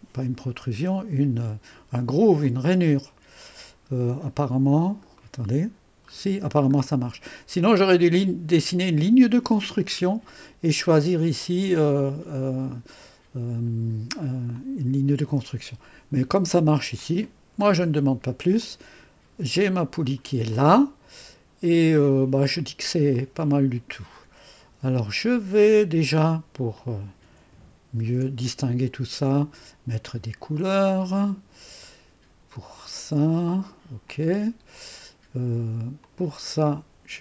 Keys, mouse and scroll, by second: 2.4 click, 2.8 click, 3.7-4.7 scroll down 1, 5.2-9.6 right drag, 5.2-6.0 scroll up 1, 11.4 click, 17.0 click, 17.6-18.0 scroll down 1, 18.6-19.9 drag, 20.3 middle click, 20.5-22.7 drag, 23.1-25.2 right drag, 26.7 click, 28.0 ctrl+d, 29.2 click, 30.5 click, 34.0 click, 36.0 click.